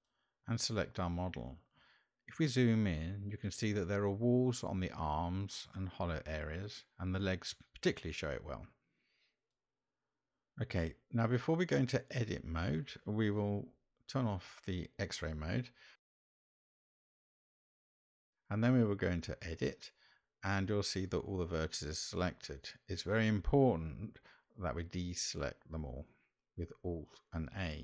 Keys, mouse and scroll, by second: 1.8-2.3 shift+middle drag, 5.9-6.5 shift+middle drag, 12.2-12.6 shift+middle drag, 21.5 Tab, 24.9 alt+a, 27.7 click.